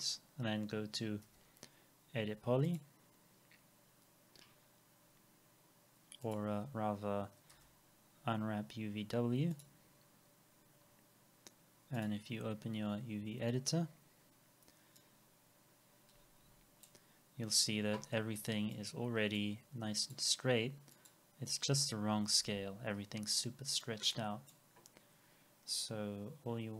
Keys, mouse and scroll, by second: 1.3 e, 3.5 scroll down 1, 4.4-4.8 scroll up 1, 7.5 u, 22.0-22.5 scroll down 1, 22.5-23.0 scroll up 1, 23.2 scroll down 1.